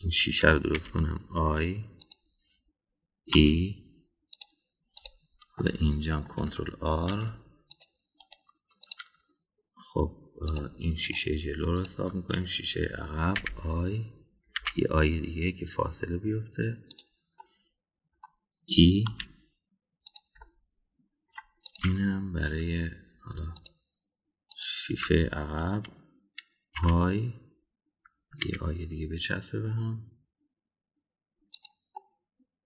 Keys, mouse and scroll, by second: 0.2 click, 1.7 i, 4.3 e, 6.0 click, 6.6 middle click, 8.0 ctrl+r, 11.5 click, 12.0 click, 12.7 shift+click, 14.3 i, 18.4 middle click, 20.0 e, 21.4-22.3 middle drag, 22.6 click, 24.5 shift+click, 25.5 shift+click, 27.8 i.